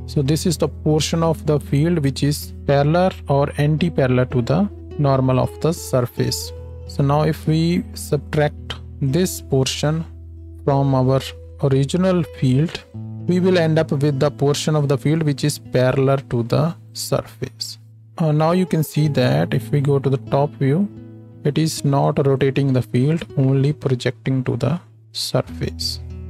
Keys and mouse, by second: 7.3 shift+d, 8.0-9.2 drag, 19.3 KP_7.